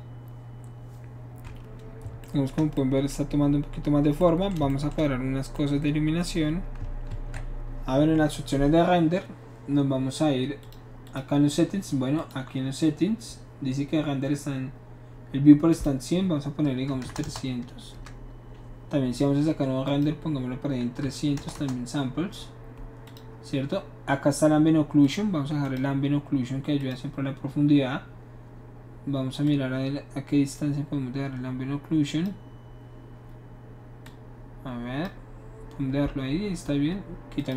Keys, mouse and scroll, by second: 2.3-3.6 shift+middle drag, 4.2-4.5 shift+middle drag, 7.1 ctrl+s, 10.6 click, 11.0 click, 12.2 click, 15.7 click, 16.9 KP_3, 17.0 KP_0, 17.2 KP_0, 17.9 Return, 19.8 click, 21.1 KP_3, 21.3 KP_0, 21.5 KP_0, 23.0 click, 25.0 click, 25.6 click, 26.8 click, 29.5-32.2 drag, 34.0-35.0 drag, 37.4 click.